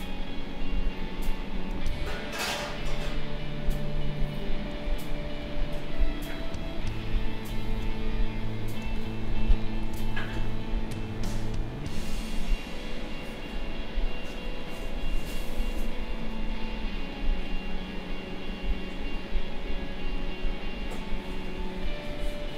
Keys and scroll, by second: 1.8 ctrl+z, 5.3 space.